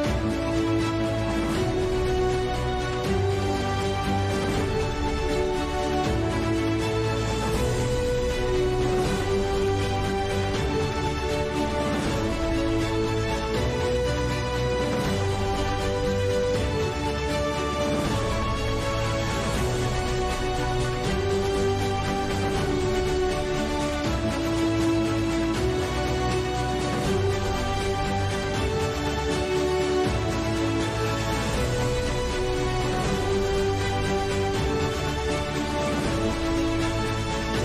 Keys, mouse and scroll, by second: 2.1 z, 2.7 z, 3.1 middle click, 3.4 shift+c, 5.0 shift+d, 5.8 r, 6.9-9.6 typing, 10.4 ctrl+z, 11.7 x, 12.4 shift+d, 13.9 shift+r, 14.8 shift+r, 16.1 shift+d, 17.9 middle click, 18.8 Tab, 19.1 BackSpace, 19.6 shift+e, 20.3 Tab, 20.6 Tab, 20.9 Delete, 21.4 BackSpace, 21.7 BackSpace, 22.6 Delete, 23.1 Right, 23.4 Tab, 24.4 Tab, 24.6 BackSpace, 25.3 shift+s, 25.6 Tab, 26.3 Tab, 26.7 a, 26.9 BackSpace, 27.1 z, 27.5 BackSpace, 28.9-33.3 typing, 29.7 Tab, 30.0 Tab, 30.3 Tab, 30.6 Tab, 30.9 ctrl+a, 31.4 Tab, 32.1 ctrl+s, 34.5-35.2 middle drag, 37.5 s.